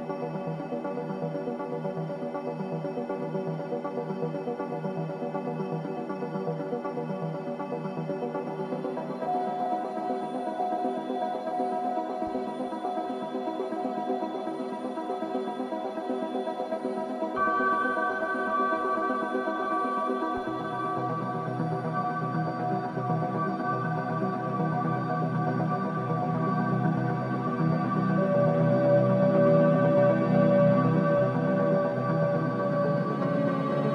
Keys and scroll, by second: 0.3 3, 0.8 ], 1.3 ], 2.9 g, 3.0 l, 3.1 a, 3.3 Return, 9.4 4, 11.4 2, 11.9 4, 22.2 3, 24.4 ], 24.7 ctrl+z, 25.2 ctrl+z, 25.8 ], 26.5 ], 28.6 4, 30.7 3, 31.3 ], 32.9 ], 33.6 4.